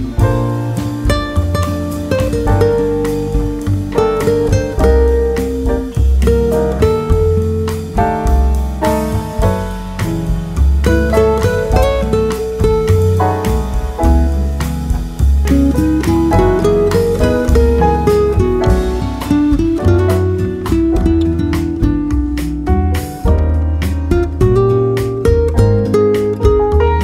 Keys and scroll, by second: 23.3 ctrl+c, 26.9 ctrl+v.